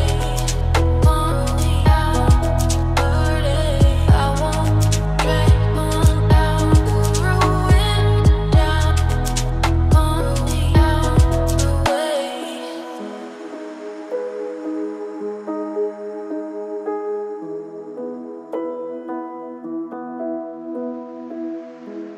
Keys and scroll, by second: 10.9 ctrl+h, 16.3 ctrl+g.